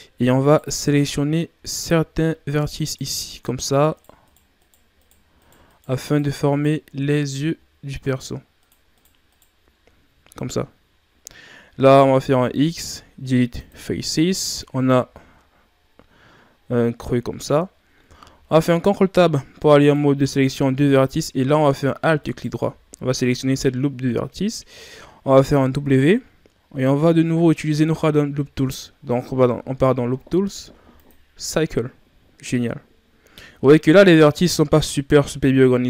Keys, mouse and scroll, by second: 0.4 right click, 2.4 shift+right click, 2.8 shift+right click, 3.5 shift+right click, 3.9 shift+right click, 4.2 shift+right click, 4.5 shift+right click, 4.9 shift+right click, 5.3 shift+right click, 5.6 shift+right click, 6.0 shift+right click, 6.4 shift+right click, 8.6 shift+right click, 8.9 shift+right click, 9.2 shift+right click, 9.7-10.6 scroll down 1, 10.6-12.2 scroll up 5, 12.2 x, 15.8-16.5 scroll down 3, 16.5-18.0 scroll up 3, 18.0 ctrl+Tab, 22.1 alt+right click, 25.6 w, 33.0-33.6 ctrl+scroll up 1, 33.6-34.1 shift+scroll up 1, 34.4-35.1 ctrl+scroll up 1, 35.1-35.8 scroll up 1.